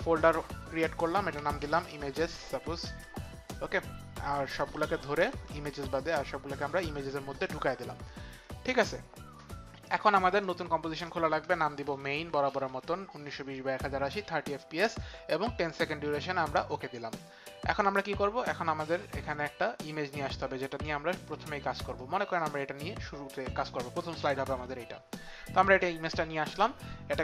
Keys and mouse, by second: 1.2-2.7 typing, 2.8 Return, 4.4 ctrl+a, 6.3 ctrl+a, 6.3 Return, 6.3 click, 6.3 s, 10.4 click, 11.6-13.1 typing, 11.9 click, 12.6 click, 15.9-16.6 typing, 16.5 click, 17.7 click, 20.1 click.